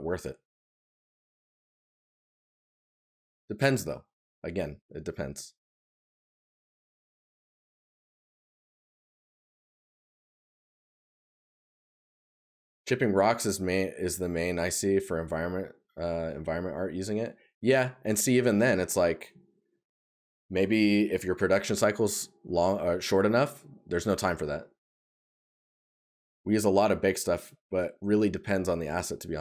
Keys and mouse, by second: 11.4 right click, 14.9 right click, 19.2 right click.